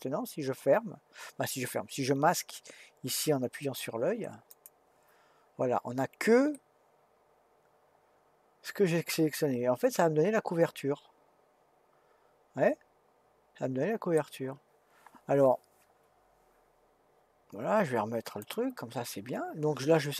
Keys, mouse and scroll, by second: 4.5 click, 6.5-9.6 middle drag, 18.4 click.